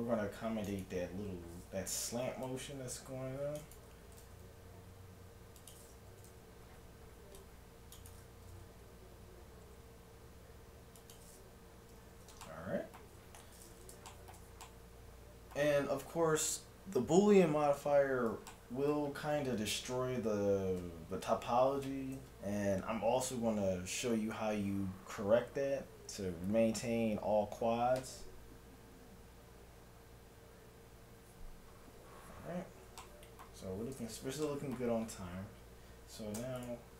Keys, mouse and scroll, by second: 2.2 c, 4.2 g, 6.2 a, 6.3 c, 8.5 g, 11.9 a, 12.1 z, 12.5-17.8 middle drag, 18.5-20.3 middle drag, 33.0-36.6 middle drag, 36.4 Tab, 36.6-36.9 right drag.